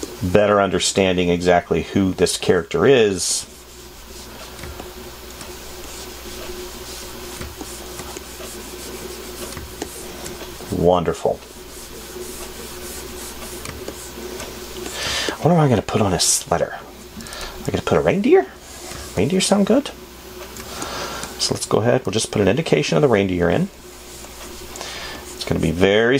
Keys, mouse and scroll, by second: 19.4 space.